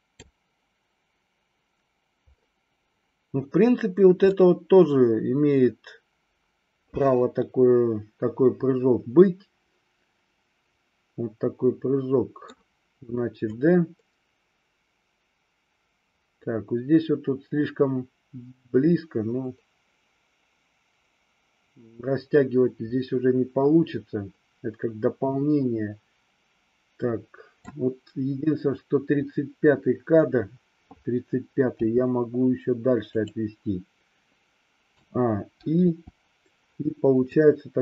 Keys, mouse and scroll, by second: 4.3-12.6 middle drag, 13.6-27.8 drag, 31.8 g, 33.2 click, 34.9 a, 35.8 i, 37.4-37.8 drag.